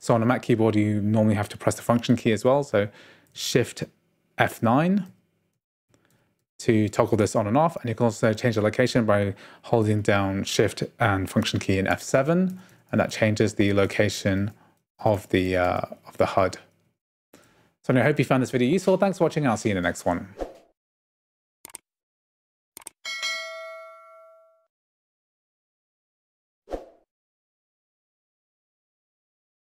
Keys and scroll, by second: 4.6 F9, 11.9 F7.